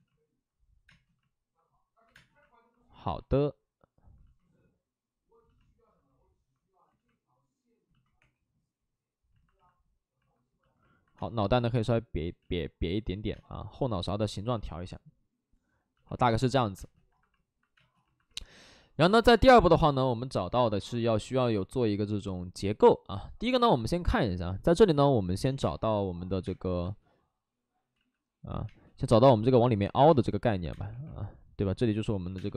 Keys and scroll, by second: 2.0 2, 2.1 space, 6.9 ctrl+z, 8.1 3, 11.1 space, 12.6 ctrl+z, 13.3 space, 16.7 space, 17.7 space, 25.5 5, 25.5 space, 26.3 1, 26.8 space, 27.9 ctrl+z, 28.7 space, 29.8 ctrl+z, 30.0 space, 30.4 2, 30.8 space, 30.8 1, 32.3 space.